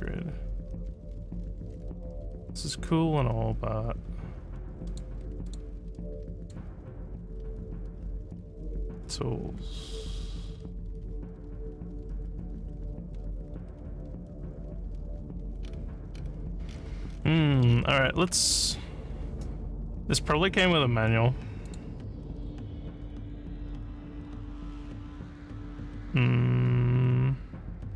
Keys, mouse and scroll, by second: 4.9 click, 5.5 click, 6.4 click, 11.4 scroll up 1, 14.9 scroll down 1, 15.6-16.3 scroll up 10, 16.7-17.2 scroll down 2, 17.7 scroll up 1, 18.2 scroll up 2, 21.7 click.